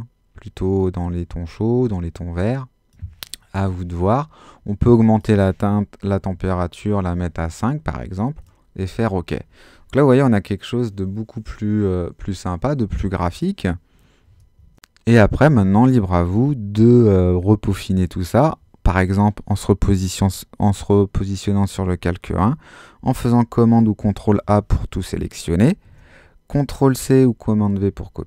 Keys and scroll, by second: 3.6 0, 6.3 5, 22.3 super+a, 26.9 super+c.